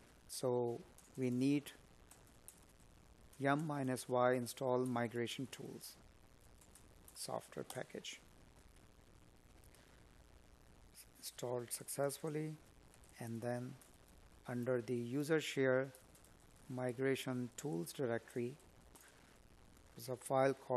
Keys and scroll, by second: 3.7 space, 8.1 Tab, 11.3 space, 12.4 Tab, 13.4 Tab.